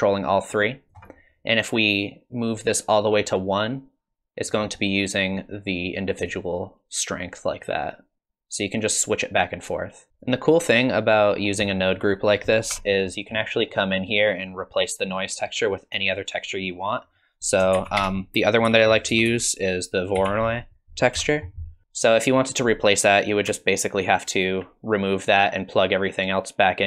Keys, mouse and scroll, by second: 2.0 click, 6.3 shift+click, 10.1 click, 11.4 scroll up 4, 11.6 middle click, 12.2 click, 12.7 Tab, 13.1 middle click, 13.7 middle click, 17.1 scroll down 2, 17.3 click, 17.7 shift+a, 23.6 alt+click, 24.9 click.